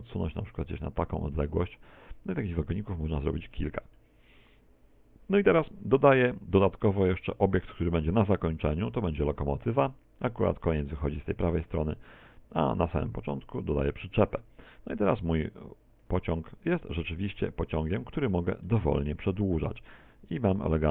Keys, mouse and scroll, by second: 2.4 click, 3.2-3.6 scroll down 3, 3.6 shift+middle click, 8.1 click, 12.1 click, 16.1 right click, 17.1 middle click, 18.0-18.7 scroll down 4, 18.4 shift+middle click, 19.8 click.